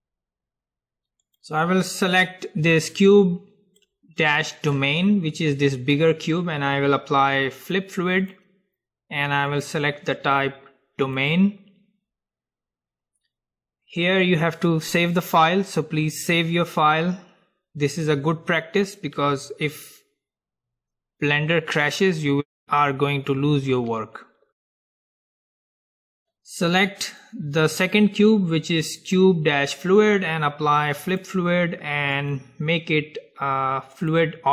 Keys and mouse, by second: 1.4-3.5 drag, 3.9-5.9 middle drag, 8.3-11.6 drag, 25.8-27.8 middle drag, 26.8-28.8 drag, 31.2-34.3 drag.